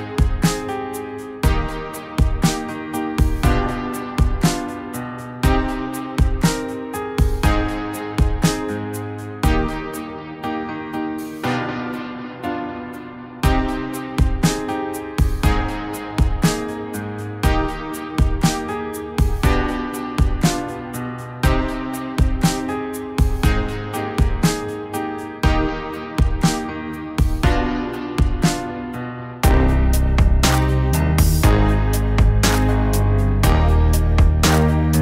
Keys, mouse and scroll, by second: 0.5 middle click, 0.7 middle click, 0.9 middle click, 1.7 middle click, 2.2 middle click, 3.4 middle click, 3.8 middle click, 22.0 middle click, 24.0 middle click, 24.9 middle click, 27.8 middle click, 28.6 middle click, 29.2 middle click.